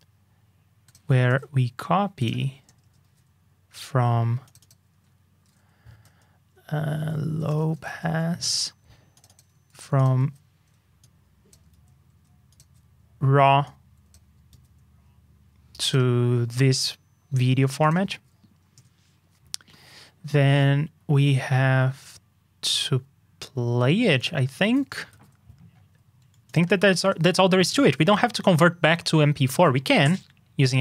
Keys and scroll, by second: 1.2 super+c, 3.0 super+v, 5.4 super+d, 9.7 super+x, 14.5 super+c, 18.1 super+v, 25.1 super+c, 27.8 super+v.